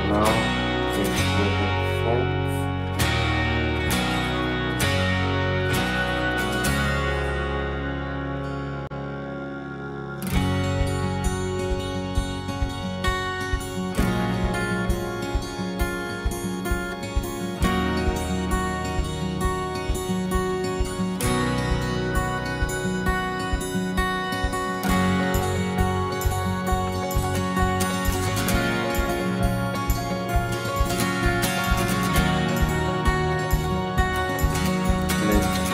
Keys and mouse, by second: 3.1 ctrl+z, 3.9-15.1 drag, 15.1 z, 16.3-35.7 drag.